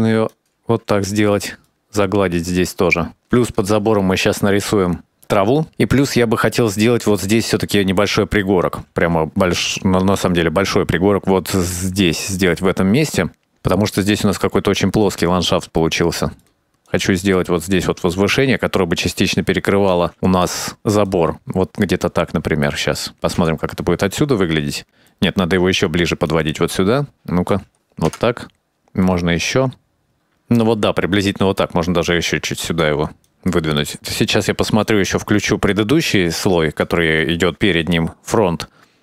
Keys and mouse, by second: 0.4 click, 0.7 shift+middle click, 1.1 click, 2.0 shift+click, 2.2 shift+click, 2.4 click, 2.9 click, 3.4 shift+click, 4.4 click, 9.9 middle click, 11.6 x, 12.1-14.6 drag, 14.7 middle click, 15.9 middle click, 16.9-19.1 drag, 19.4 shift+click, 20.2-21.3 middle drag, 21.6-23.3 drag, 23.5 middle click, 24.6 KP_0, 25.1 middle click, 25.9 click, 26.9 shift+click, 27.3 middle click, 28.7 middle click, 28.7 KP_0, 29.0 click, 29.9 middle click, 30.4 shift+click, 30.6 shift+click, 30.8 KP_0, 31.6 click, 32.8 middle click, 33.1 click, 33.8 click, 34.0 middle click, 35.0 click, 36.0 click, 36.6 shift+click.